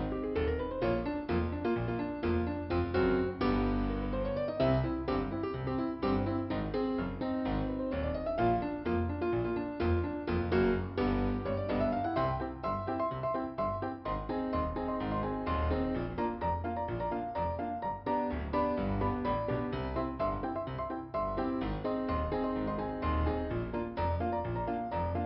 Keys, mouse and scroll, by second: 0.5 scroll down 2, 5.3 ', 5.9 click, 15.3 click, 18.8 scroll up 1, 20.7 click, 21.8 click, 23.7 click.